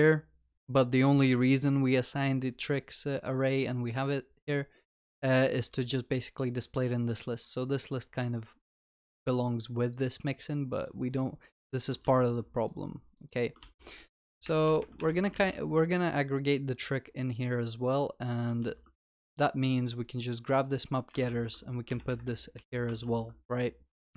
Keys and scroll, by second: 12.1 ctrl+x, 15.0 ctrl+y, 15.4 ctrl+s, 22.5 ctrl+v, 23.0 ctrl+y, 23.1 ctrl+s.